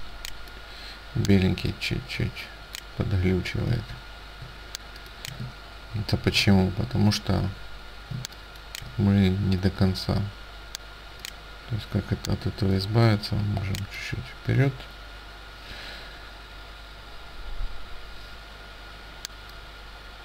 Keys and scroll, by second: 4.5 ctrl+z, 5.5 ctrl+space, 8.2 ctrl+space.